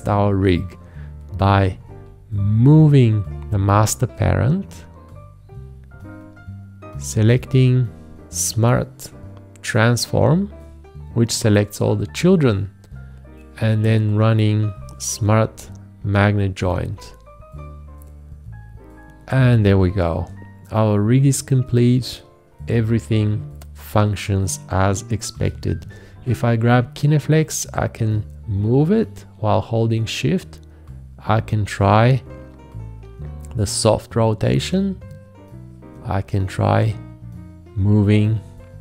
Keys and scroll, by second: 1.5 v, 25.4 g.